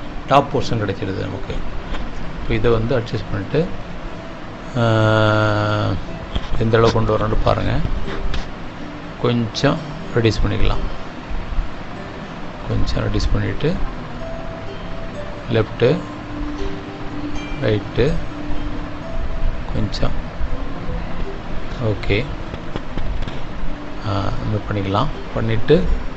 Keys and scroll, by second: 9.7 space, 17.8 Right, 19.2 Up, 25.4 Up.